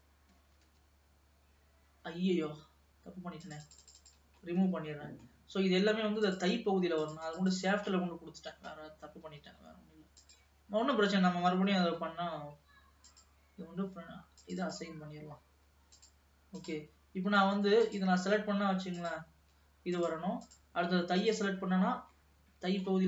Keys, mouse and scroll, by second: 0.5 ctrl+s, 3.5 click, 4.2 click, 4.5-6.4 middle drag, 6.4 click, 7.1 click, 8.1 middle click, 8.9-9.6 scroll up 2, 9.6 alt+a, 10.3 click, 12.0 l, 13.2 click, 14.5-16.4 drag, 16.8 click, 18.0 click, 19.1-20.3 drag, 20.6 click, 21.3 click, 21.8-22.4 scroll down 4, 22.4 middle click.